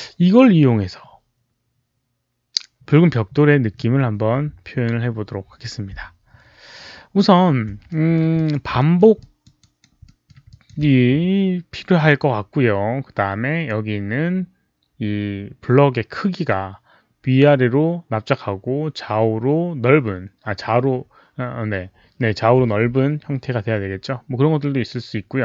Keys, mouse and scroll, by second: 7.8 alt+middle drag, 8.2 alt+click, 8.7 alt+middle click, 8.8 alt+middle click, 9.1 alt+click, 9.5 alt+right click, 9.9 alt+middle click, 10.4 alt+click, 13.8 alt+click, 13.8 alt+middle click, 13.8 alt+right click, 18.7 alt+click, 18.7 alt+middle click, 18.7 alt+right click.